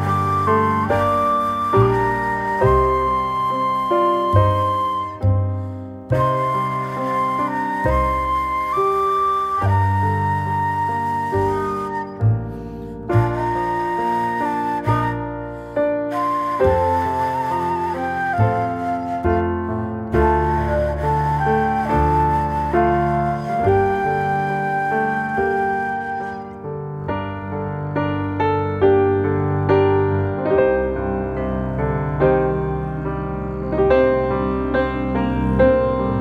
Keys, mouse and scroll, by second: 0.1 scroll up 1, 0.5 shift+middle click, 0.8 scroll up 2, 1.6 e, 4.7 shift+middle click, 5.0 scroll up 1, 5.6 click, 6.2 click, 6.8 g, 9.0 scroll down 4, 9.4-10.2 middle drag, 10.2 click, 10.5 click, 10.7-11.9 middle drag, 11.9 e, 13.8 scroll down 2, 14.5 Tab, 15.0-16.0 middle drag, 16.0 g, 20.5-21.4 middle drag, 21.4-21.8 scroll down 1, 21.8-22.4 middle drag, 22.4-22.9 scroll down 2, 22.9-23.5 middle drag, 23.5-24.9 scroll down 1, 24.9 shift+d, 27.3 alt+middle click, 27.7 shift+middle click, 28.3 r, 32.0 middle click, 32.7-33.0 scroll up 1, 33.0 middle click, 33.3-33.9 scroll down 2, 33.9 middle click, 34.4 s, 35.9-36.2 middle drag.